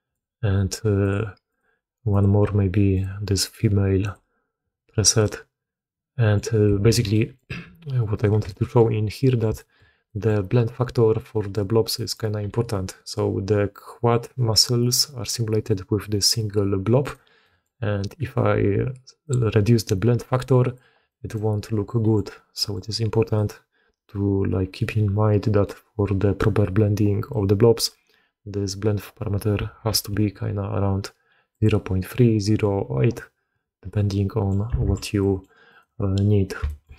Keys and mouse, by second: 1.0 click, 1.5-2.9 drag, 3.9-5.0 drag, 5.2-6.3 drag, 6.8 alt+a, 7.0 drag, 8.1 drag, 8.4-8.7 shift+middle drag, 9.5 shift+middle drag, 10.0 middle click, 11.1 middle click, 11.8 middle click, 12.4 g, 17.3 middle click, 19.2-20.7 drag, 21.0 middle drag, 21.8 middle click, 22.4 middle drag, 23.2-25.6 drag, 27.2 middle click, 29.8 alt+b, 33.1-34.4 middle drag, 34.7 alt+a, 35.1 click, 35.6 click, 36.5 shift+drag.